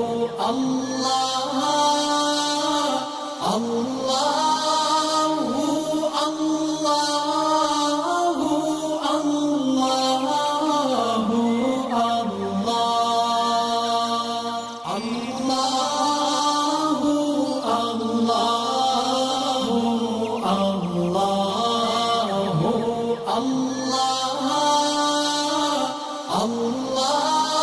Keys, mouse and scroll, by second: 0.4 click, 1.0-1.3 click, 1.8-2.3 drag, 3.2-4.2 alt+scroll down 2, 4.4-5.7 alt+scroll up 2, 5.7 click, 6.7 shift+click, 7.9-8.2 click, 8.9-9.6 alt+scroll down 3, 9.7-10.3 alt+scroll up 2, 10.3-11.9 drag, 12.0 space, 12.1 click, 12.8 alt+scroll down 2, 13.1 alt+scroll up 1, 13.5-15.5 drag, 16.2 alt+scroll down 1, 16.6 space, 16.6 click, 17.0 alt+scroll down 1, 17.5 alt+scroll up 1, 18.3 alt+scroll up 1, 18.6-20.8 drag, 21.9-22.2 alt+scroll down 1, 22.3 scroll up 2, 22.7-24.9 drag, 25.6 alt+scroll down 1, 26.1 alt+scroll down 1, 26.4 space, 26.4 click, 26.9 alt+scroll up 1.